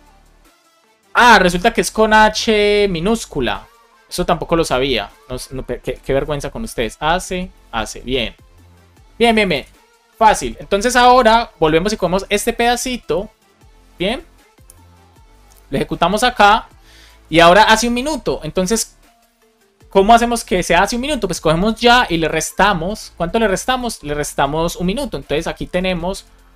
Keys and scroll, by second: 5.7 BackSpace, 7.9 BackSpace, 8.3 space, 9.2 BackSpace, 9.4 super+s, 12.0 super+c, 14.6 Return, 15.2 super+v, 25.1 alt+shift+Left, 25.6-26.5 typing.